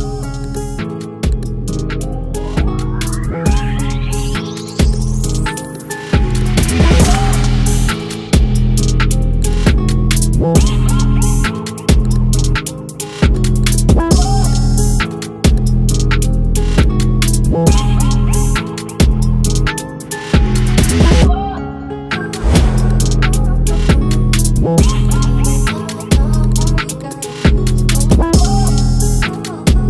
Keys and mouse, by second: 22.7 click.